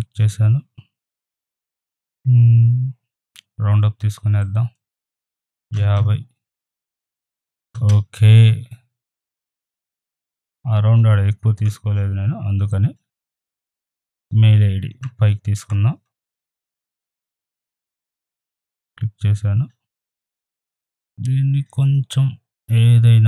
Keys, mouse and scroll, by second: 4.4-6.6 drag, 6.6 Return, 9.1 click, 9.6 right click, 9.7 click, 10.5 shift+right click, 10.6 shift+click, 11.6 ctrl+e, 13.0 click, 13.6-14.0 scroll down 1, 14.0 click, 16.1 ctrl+], 18.1 right click, 18.4-20.7 drag, 20.7 right click, 20.8 click.